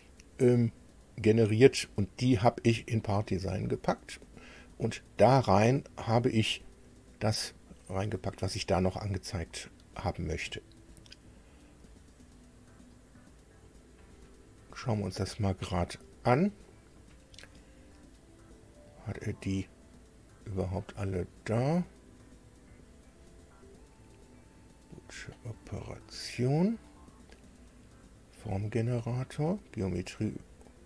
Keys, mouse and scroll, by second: 4.5 click.